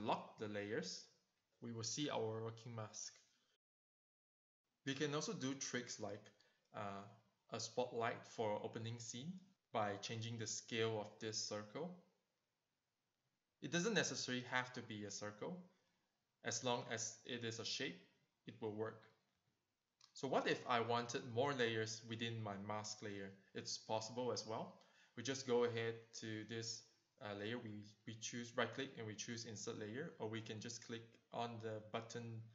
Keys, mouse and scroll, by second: 0.2 click, 4.6 Return, 6.7 click, 7.0 click, 7.1 double click, 7.7 click, 8.2 click, 8.2 double click, 8.9 click, 10.4 shift+click, 11.5 shift+click, 12.6 click, 14.6 click, 15.2 click, 17.2 shift+click, 19.6 click, 20.4 click, 21.0 click, 21.9 Return, 29.2 right click, 31.0 click, 32.1 click.